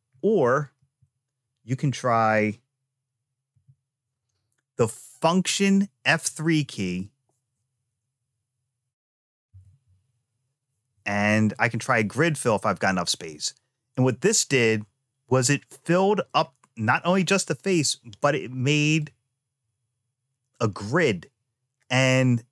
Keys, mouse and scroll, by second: 0.5 ctrl+z, 3.3 F3, 18.9-21.8 drag.